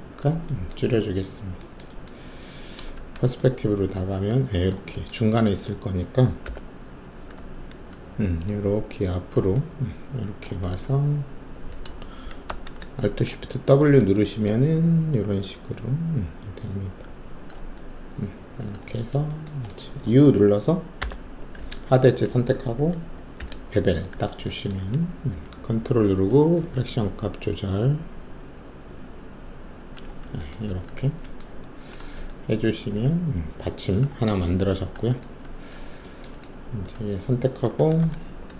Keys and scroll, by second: 2.9 alt+shift+q, 4.0 alt+`, 6.4 5, 7.3 w, 12.5 alt+shift+w, 20.9 alt+u, 23.4 alt+shift+b, 30.9 ctrl+alt+`, 38.0 alt+w.